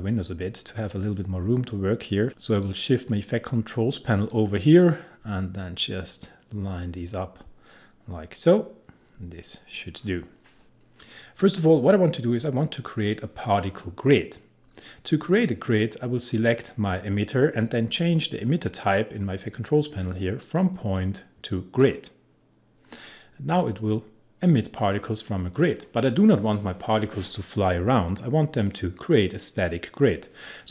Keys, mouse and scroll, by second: 20.4-27.7 drag.